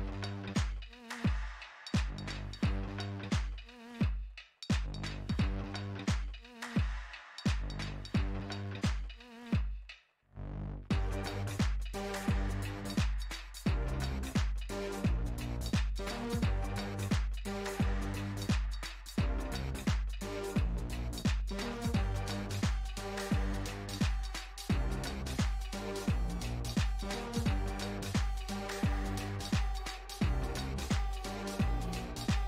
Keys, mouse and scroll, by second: 0.5 f, 1.6-3.2 drag, 3.2-5.4 middle drag, 5.4-6.8 drag, 6.8 f, 7.8-8.8 drag, 8.8-9.9 middle drag, 9.9 click, 10.7-12.5 middle drag, 12.5-14.4 drag, 14.4-19.5 middle drag, 19.5-22.2 drag, 22.8-25.6 middle drag, 25.6 p, 30.3-32.4 drag.